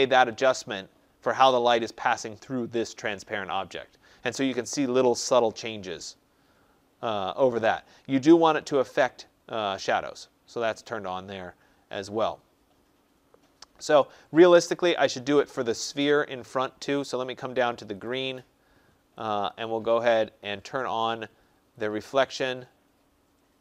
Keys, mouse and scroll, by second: 14.7 click, 17.9 click, 19.5 click, 21.7 click.